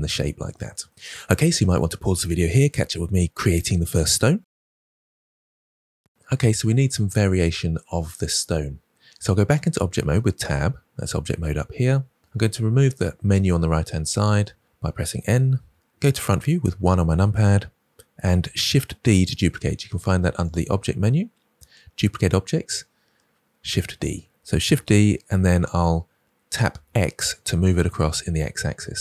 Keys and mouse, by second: 3.6-6.8 middle drag, 10.0 Tab, 15.2 n, 16.1 KP_1, 20.4-23.9 drag, 24.6 shift+d, 26.7 x.